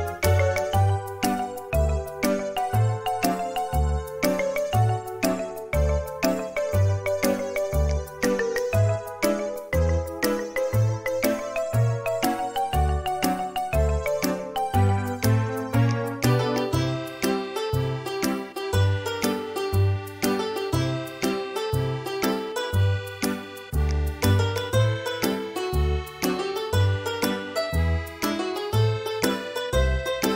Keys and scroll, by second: 3.4 Escape, 10.0 ;, 13.1-13.6 typing, 16.0 space, 21.2 Delete, 28.2 m.